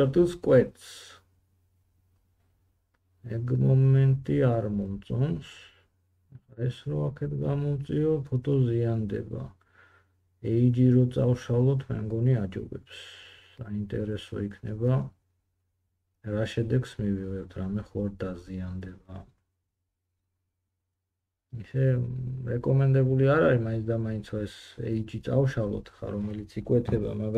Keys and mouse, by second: 2.2 g, 5.4 middle click, 5.6-10.4 drag, 5.7 g, 10.4 middle click, 10.5-13.9 drag, 10.6 g, 14.0-16.8 drag, 14.3 g, 16.8 middle click, 17.0 g.